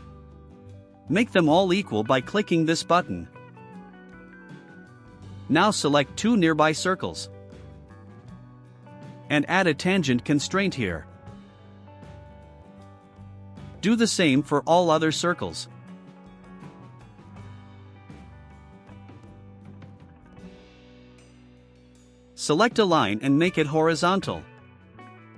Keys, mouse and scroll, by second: 3.2 click, 6.5 click, 7.7 ctrl+click, 11.8 click, 13.1 click, 13.4 ctrl+click, 13.9 click, 14.4 click, 14.7 ctrl+click, 15.1 click, 15.7 click, 15.9 ctrl+click, 16.3 click, 16.8 click, 17.2 ctrl+click, 17.5 click, 18.2 click, 18.4 ctrl+click, 19.4 click, 23.6 click.